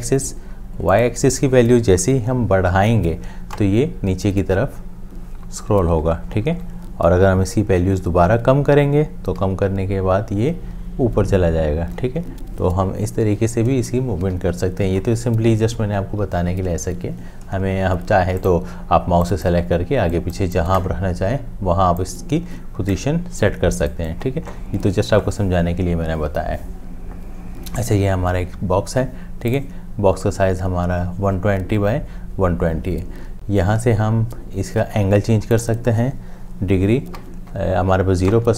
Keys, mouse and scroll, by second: 3.5 Up, 9.4 Down, 14.3 Up, 37.5 Up.